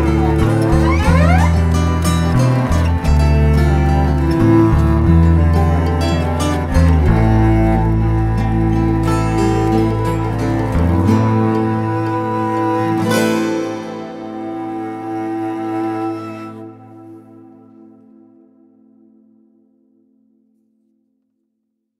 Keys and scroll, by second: 15.1 shift+b, 15.9 shift+], 16.5 shift+], 16.8 [, 20.2 v.